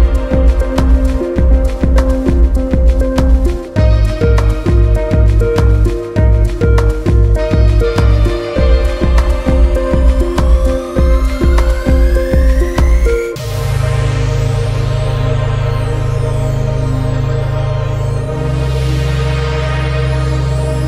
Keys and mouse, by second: 0.2-1.6 drag, 3.6 middle click, 3.8 click, 5.1-6.0 drag, 12.5 ctrl+shift+click.